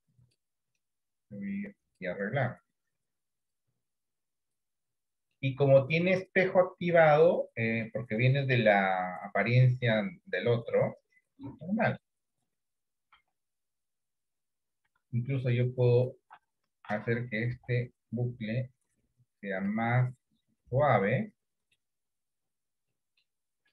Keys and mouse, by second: 1.3 click, 2.6-3.6 drag, 4.2 click, 5.4 middle click, 9.6-12.0 middle drag, 13.2 KP_1, 13.5 KP_3, 17.5 Delete, 21.2 middle click, 23.0 middle click.